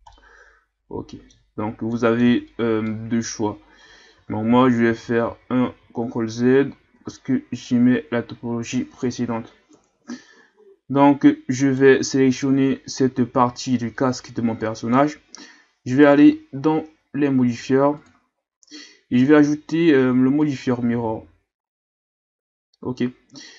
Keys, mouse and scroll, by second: 0.1-1.5 middle drag, 1.5-1.9 scroll up 2, 1.9 middle click, 2.2 Tab, 2.9-4.1 middle drag, 4.1 ctrl+z, 4.5 ctrl+z, 4.9 ctrl+z, 5.3 ctrl+z, 7.0 Tab, 7.5-9.7 scroll down 8, 9.7 KP_1, 10.6-11.3 scroll up 1, 11.6 right click, 12.5-15.6 ctrl+scroll down 1, 18.0-19.1 drag, 20.6-21.6 drag, 21.6-21.9 scroll down 1, 22.6-23.5 scroll up 4.